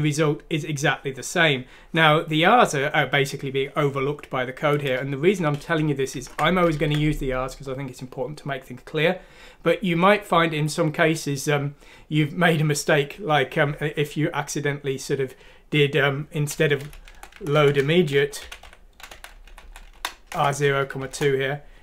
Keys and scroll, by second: 5.4 ctrl+z, 5.6 ctrl+z, 6.1 ctrl+z, 6.7 ctrl+z, 16.8 Insert, 17.1 Delete, 17.3 Delete, 17.5 Delete, 17.8 Insert, 18.2-21.1 typing, 19.3 Tab, 19.4 Tab, 21.0 F6, 21.1 Return.